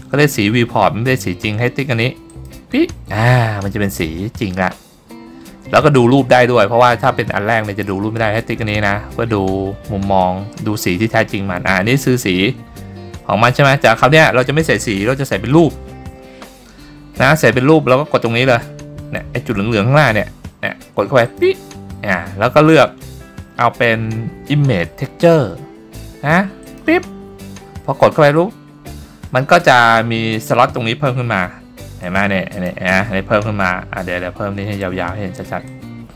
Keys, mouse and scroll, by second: 2.7 click, 21.4-27.2 drag, 32.1 click, 32.6 click, 35.8-36.1 drag.